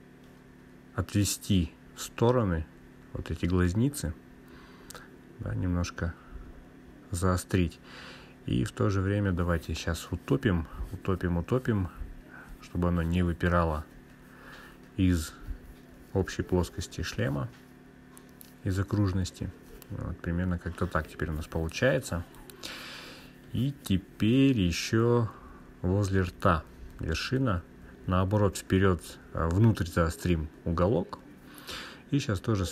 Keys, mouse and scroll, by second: 3.7 g, 6.4 click, 7.6 click, 9.3-10.7 scroll up 2, 10.7 g, 15.5 Left, 15.9 Left, 16.9 Return, 18.8 click, 19.0 click, 20.1 scroll down 2, 21.1-25.7 drag, 26.9 click, 29.9 g, 32.1 click.